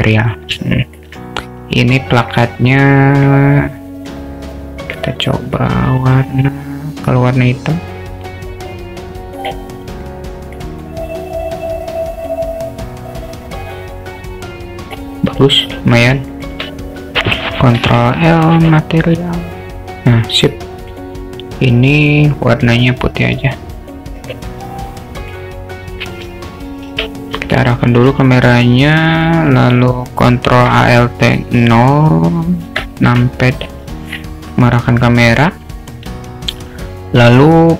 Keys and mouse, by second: 0.3-0.7 drag, 0.8 alt+shift+middle click, 2.4-2.8 drag, 3.2 drag, 15.7 click, 16.4 shift+click, 17.8 ctrl+l, 20.9 click, 22.5 click, 24.6 drag, 25.2 click, 29.3 drag, 32.9 ctrl+alt+KP_0.